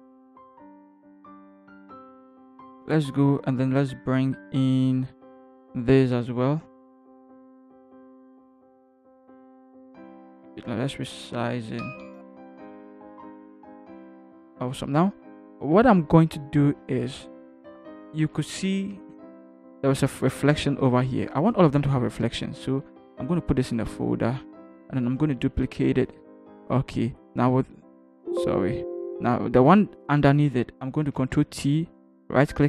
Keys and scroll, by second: 13.2 Return, 13.3 Left, 13.4 Left, 13.5 Left, 13.5 v, 13.7 Left, 18.3 ctrl+h, 18.9 ctrl+=, 23.7 ctrl+g, 25.5 ctrl+k, 31.1 ctrl+t.